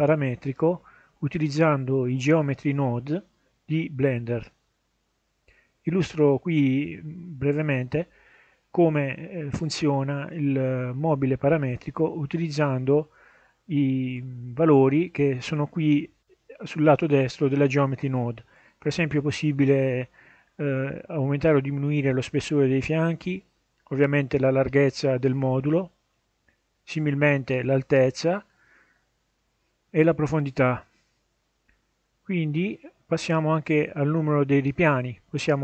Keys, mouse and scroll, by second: 18.8 ctrl+shift+a, 22.8-25.2 drag, 26.3-29.7 drag, 30.7-33.0 drag, 33.8-35.6 drag.